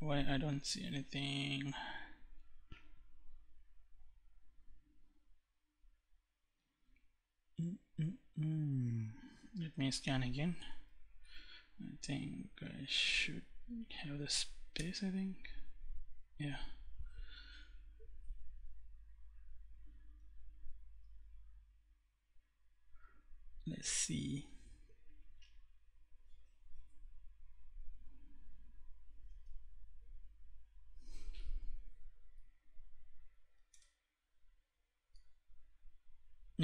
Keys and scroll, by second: 10.1 Up, 11.0 Left, 13.4 space, 14.1 Return, 31.1 Up, 33.1 Return.